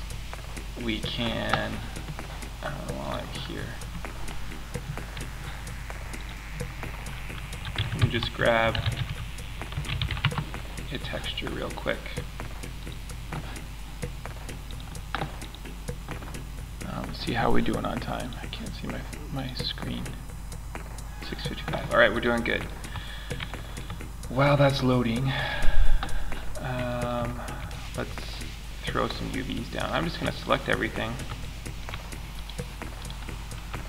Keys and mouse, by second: 22.0-23.2 middle drag, 26.2-27.1 middle drag.